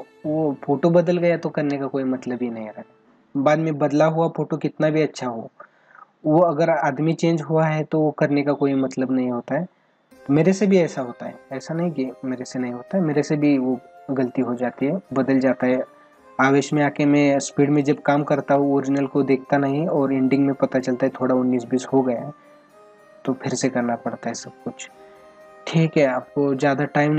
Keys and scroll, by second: 25.9 space.